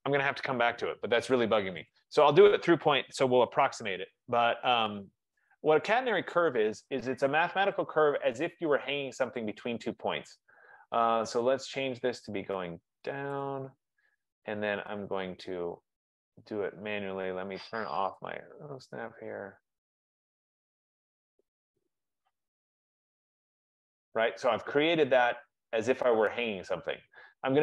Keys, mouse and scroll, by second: 2.0 click, 4.1-5.9 typing, 7.9 click, 9.6 click, 13.6 click, 18.4 click, 23.7 click, 24.1 F15.